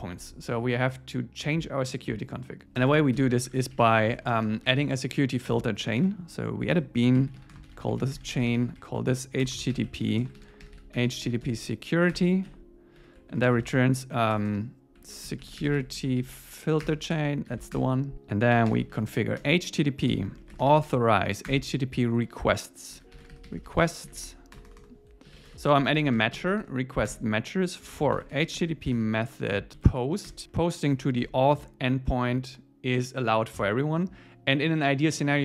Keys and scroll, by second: 2.8 Return, 3.1 alt+l, 6.7 Return, 12.1 Return, 13.0 Right, 16.8 Return, 17.5 alt+8, 17.7 Return, 19.4 Return, 21.5 Return, 25.5 Return, 27.1 Return, 29.7 Down, 30.3 Return, 31.6 Tab.